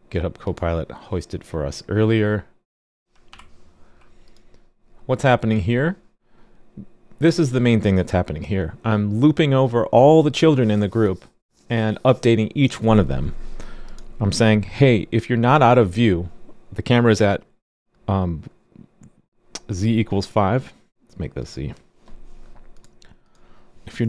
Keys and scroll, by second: 3.3 super+/.